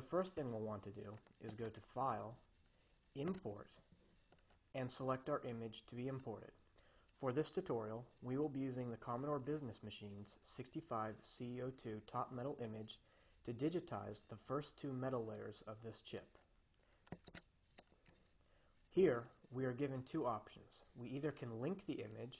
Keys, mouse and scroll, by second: 2.1 click, 3.7 click, 17.4 click.